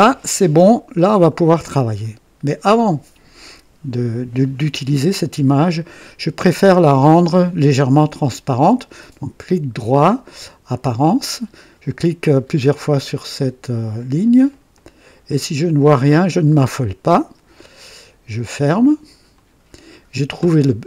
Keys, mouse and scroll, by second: 0.2 right click, 0.9-1.2 scroll down 2, 2.0-2.6 right drag, 8.9 right click, 10.7 click, 13.2 click, 13.7 click, 15.6 click, 19.3 click.